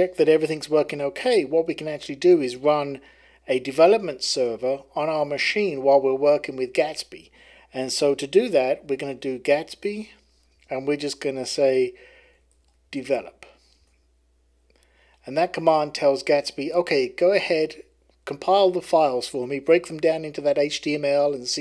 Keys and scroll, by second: 8.6-10.5 typing, 11.9-13.6 typing, 13.7 Return.